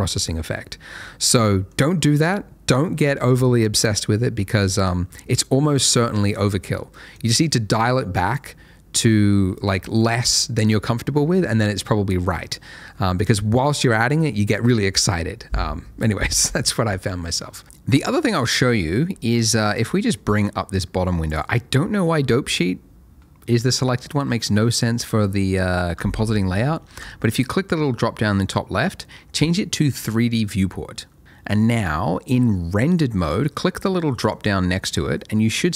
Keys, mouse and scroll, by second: 0.6 middle click, 7.1 click, 17.2 middle click, 19.7 click, 24.8 middle click, 27.0 click, 34.3 click.